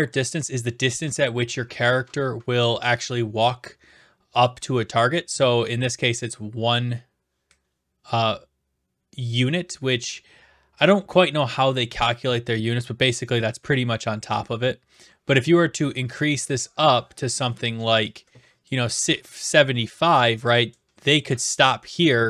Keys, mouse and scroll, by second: 18.6-19.7 drag.